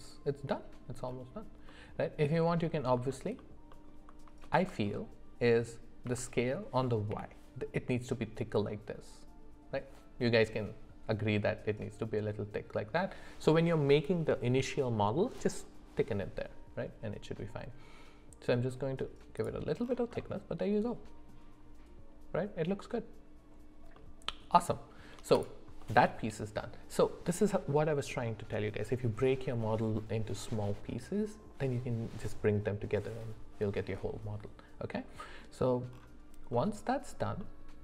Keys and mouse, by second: 1.7 middle click, 3.4 alt+middle click, 4.4 shift+middle drag, 6.0 s, 20.2-21.3 middle drag, 23.9 middle click, 24.7 shift+middle click, 25.8 middle click.